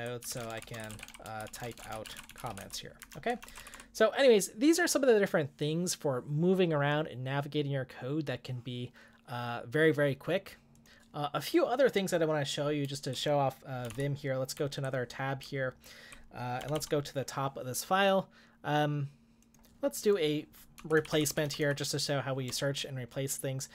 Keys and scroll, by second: 0.0-4.1 typing, 12.9-17.1 typing, 20.8 j, 21.0 j, 21.1 j, 21.3 j.